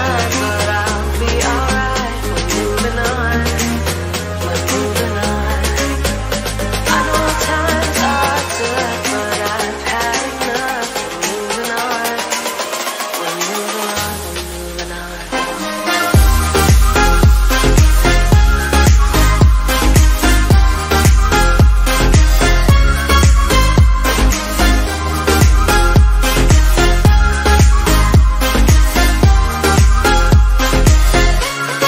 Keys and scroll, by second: 3.9 ctrl+z.